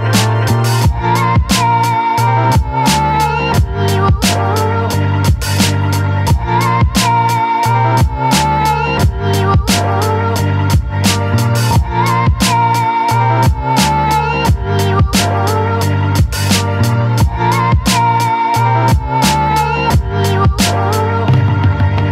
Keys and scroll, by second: 0.0-4.2 typing, 5.3 p, 6.3 t, 7.4 d, 7.9 w, 8.8 n, 9.3 n, 10.8 Return.